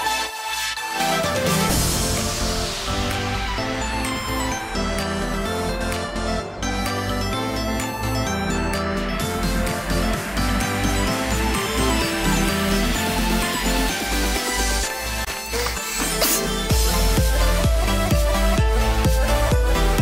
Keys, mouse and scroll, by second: 0.1 shift+middle click, 0.4 middle click, 0.9 middle click, 1.8 middle click, 2.7 shift+middle click, 6.9 shift+middle click, 7.6 alt+a, 7.9 shift+middle click, 8.2 middle click, 10.1 click, 11.0 click, 11.3 middle click, 12.5 click, 13.0 click, 13.3 click, 13.8 click, 14.2 middle click, 15.2 shift+middle click, 15.5 middle click, 18.2 middle click.